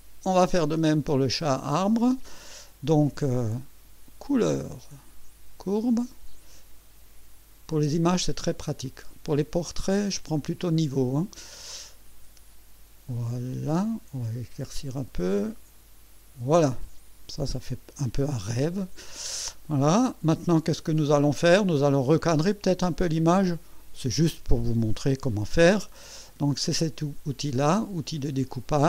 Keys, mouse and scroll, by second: 1.5 click, 4.2 click, 5.6 click, 7.7-16.6 drag, 17.6 click, 19.7-20.9 middle drag.